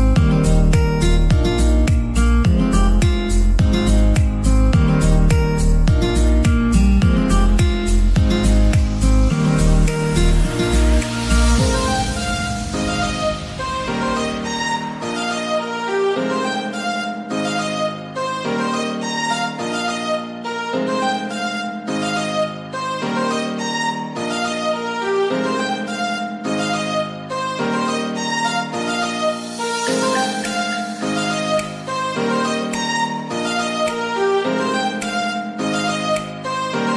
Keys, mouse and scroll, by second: 1.8 click, 2.3 click, 2.5 middle click, 2.9-4.0 scroll up 2, 4.0 middle click, 4.4 scroll up 2, 4.6 middle click, 5.1 e, 5.9 s, 7.4 g, 8.8 g, 10.4 e, 13.9-15.2 middle drag, 15.2 g, 16.8 s, 17.9-20.5 middle drag, 20.5 scroll up 2, 21.2 click, 21.8 shift+drag, 22.6 shift+click, 22.9 click, 23.4 shift+click, 24.0 alt+click, 24.6-25.6 middle drag, 25.6 alt+shift+click, 26.3-27.2 middle drag, 27.2 alt+shift+click, 27.9-28.9 middle drag, 28.9 alt+shift+click, 29.3-29.7 scroll down 2, 29.7-30.6 middle drag, 30.6 scroll up 2, 31.0 ctrl+b.